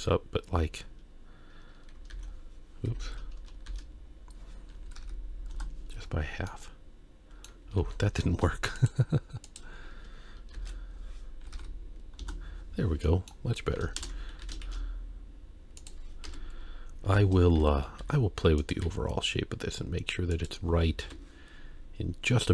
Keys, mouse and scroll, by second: 2.2 ctrl+e, 3.7 shift+e, 6.5-7.5 middle drag, 7.8 ctrl+z, 8.8 shift+click, 9.5 shift+click, 10.5 shift+e, 13.0 middle click, 14.0 ctrl+KP_Add, 14.4 s, 16.3 KP_1, 17.0 KP_3, 18.0 Tab, 18.0 r, 18.8 g, 21.0 KP_1.